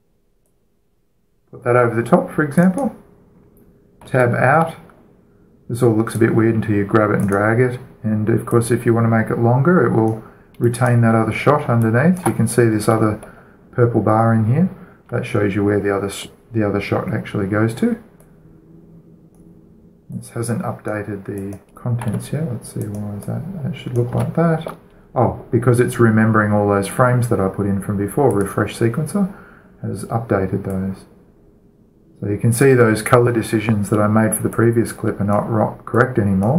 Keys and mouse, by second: 0.0-1.1 drag, 0.0 a, 1.3 middle click, 1.7-3.0 right drag, 3.3-4.9 drag, 4.8 Tab, 6.9-7.9 right drag, 7.9-8.2 drag, 8.6-9.2 drag, 9.8-11.4 right drag, 12.2-12.6 alt+shift+drag, 12.2-12.6 alt+shift+right drag, 12.6 middle click, 12.7 alt+shift+click, 12.7 alt+shift+right click, 12.8 middle click, 12.9 alt+shift+click, 12.9 alt+shift+right click, 13.0 middle click, 13.1 click, 13.1 right click, 13.2-13.6 middle drag, 13.8-15.6 middle drag, 16.5-17.1 middle drag, 18.9-22.1 drag, 22.1 middle click, 22.7 Tab, 23.9-24.9 middle drag, 24.9 Tab, 25.5-26.3 drag, 28.9-30.7 drag, 31.5-33.3 drag, 33.5-35.1 drag, 35.3-36.5 drag.